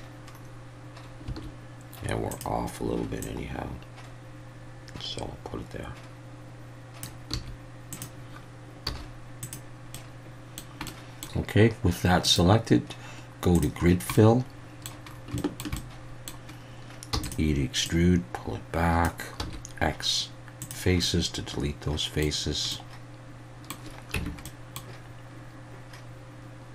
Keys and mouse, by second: 1.3 s, 2.3 click, 3.3-7.0 drag, 7.3 s, 7.9 drag, 8.9 z, 10.0 middle click, 10.9 middle click, 12.3-13.6 drag, 14.2 middle click, 15.4 shift+middle drag, 15.8-16.4 middle drag, 17.1 e, 17.2-19.0 drag, 19.4 x, 21.0-22.2 middle drag, 22.7-23.7 middle drag, 24.2 Tab, 24.4-24.8 middle drag.